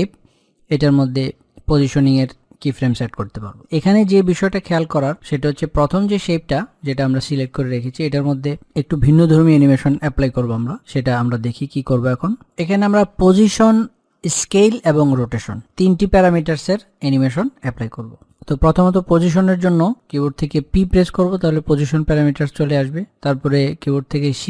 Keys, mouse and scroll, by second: 7.0 click, 12.8 click, 19.3 click, 21.2 p.